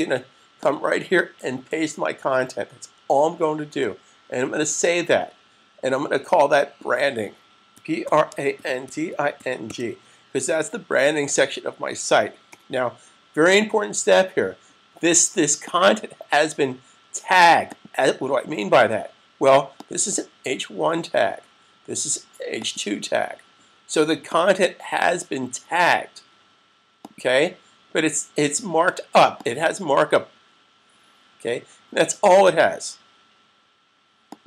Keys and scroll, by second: 1.6 super+v, 4.9 super+s, 7.3-9.8 typing.